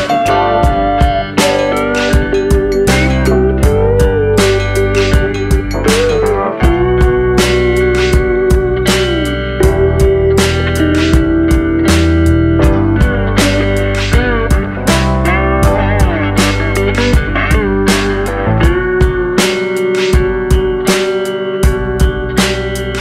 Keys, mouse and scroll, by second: 1.4 scroll up 1, 1.4 middle click, 1.8-2.2 scroll down 2, 2.0 middle click, 3.2 scroll up 1, 3.5 Tab, 3.8 scroll up 1, 4.2 click, 4.8 alt+shift+click, 5.4 click, 6.6 middle click, 7.0 scroll down 2, 7.5 alt+shift+click, 8.0 alt+shift+click, 9.2 alt+shift+click, 11.1 alt+shift+click, 12.2 ctrl+b, 13.9 click, 14.1 middle click, 16.1 Tab, 16.5 click, 17.5 click, 18.2 KP_7, 18.7 KP_1, 19.5 shift+d, 22.2 s.